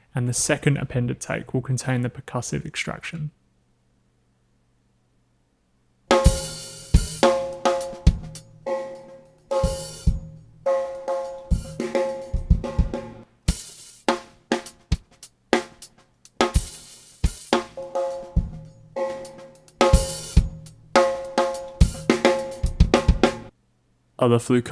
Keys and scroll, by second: 5.6 w, 6.1 space, 23.5 space.